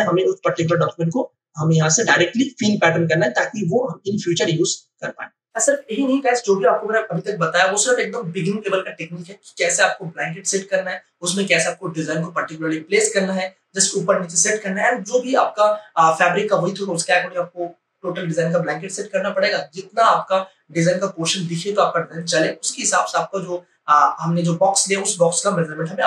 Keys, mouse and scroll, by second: 0.7 ctrl+alt+z.